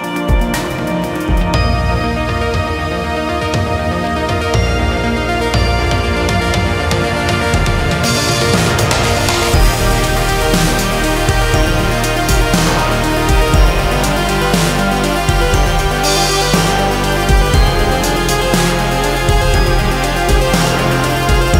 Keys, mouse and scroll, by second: 1.3 ctrl+z, 2.2 ctrl+z, 2.6-3.7 middle drag, 3.7-7.7 drag, 8.6-9.9 drag, 10.5-12.1 drag, 12.9-14.2 drag, 15.0-16.4 drag, 17.8-19.7 drag, 20.4-21.5 drag.